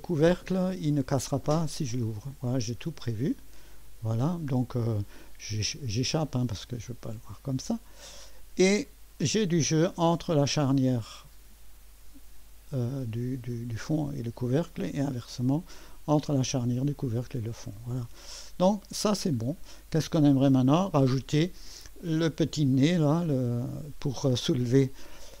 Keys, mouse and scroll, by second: 5.6 Escape, 7.2 Escape, 8.4-8.9 scroll up 1, 8.9-12.3 drag, 14.7-17.0 scroll, 17.9-18.6 typing, 20.1 3, 21.9-25.4 drag.